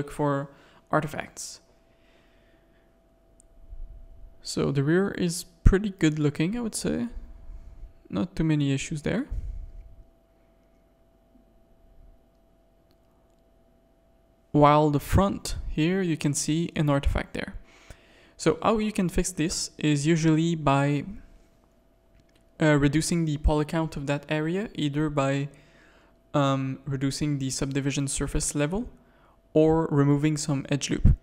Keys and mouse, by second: 0.9 click, 3.3 KP_3, 4.1 Tab, 4.9 1, 5.4 shift+middle click, 5.8 z, 6.0 a, 7.9 Tab, 8.4 z, 8.8 alt+a, 9.2 Tab, 10.1 ctrl+r, 10.7 Tab, 11.1 z, 11.5 z, 12.9 shift+click, 13.5-13.8 middle drag, 13.5 z, 14.6-15.0 middle drag, 15.2-16.1 shift+middle drag, 16.2 click, 17.3 /, 18.4 KP_3, 19.5 shift+click, 20.1 Tab, 20.8 click, 21.0 z, 21.2 a, 23.6 x, 24.3 a, 26.7 middle click, 27.8 middle click, 28.2 shift+middle click.